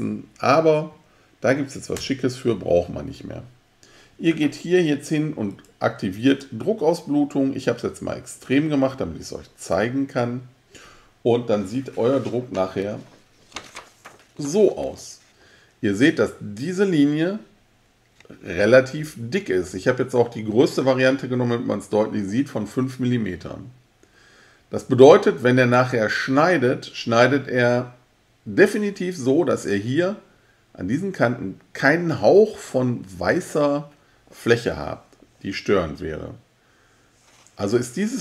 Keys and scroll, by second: 1.9 BackSpace.